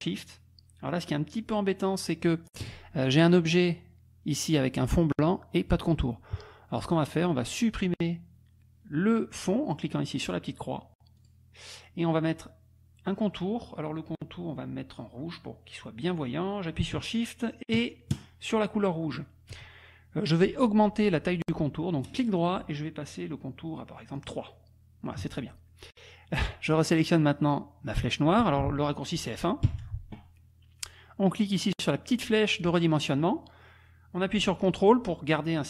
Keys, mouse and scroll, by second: 11.3 click, 18.1 shift+click, 22.1 right click, 24.2 click, 29.7 F1, 32.6-35.6 drag.